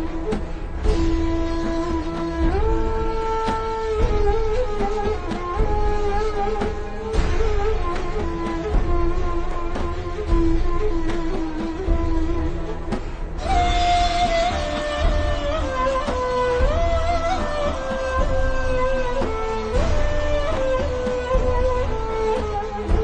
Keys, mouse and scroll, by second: 1.5 v, 1.7 click, 3.0 a, 3.2 click, 4.8 v, 5.9 click, 7.2 v, 7.4 click, 7.8 alt+shift+scroll down 1, 10.6 alt+shift+scroll up 1, 11.2 alt+shift+scroll up 1, 11.7-12.3 scroll up 1, 13.4 alt+shift+scroll down 1, 14.0 alt+shift+scroll up 1, 14.8 alt+shift+scroll up 2, 15.1 v, 15.2 click.